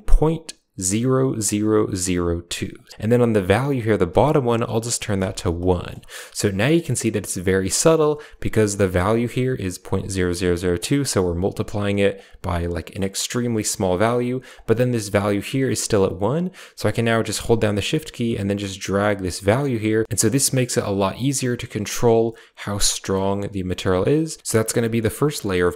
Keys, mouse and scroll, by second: 4.1-5.5 drag, 8.9-11.3 drag, 12.0-14.4 drag, 15.8-20.0 drag, 20.2-24.4 shift+drag, 24.4 g, 25.2 middle click, 25.5 middle drag.